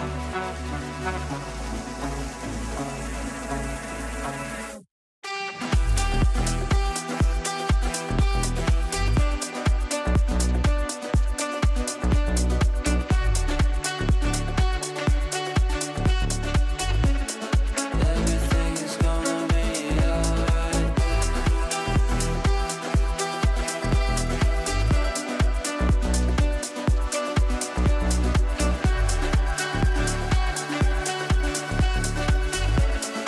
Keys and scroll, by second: 14.7 c.